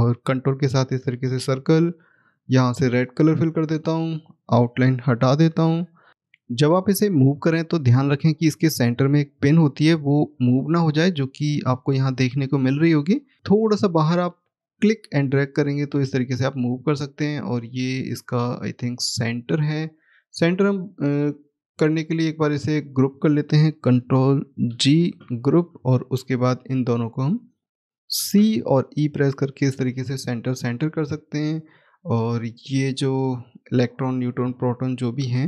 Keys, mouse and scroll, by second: 2.2 click, 5.4 right click, 10.3 scroll up 1, 13.3-13.8 scroll down 1, 13.8 click, 25.8 click, 27.0 shift+click, 28.0 c, 29.6 click, 32.4 shift+click.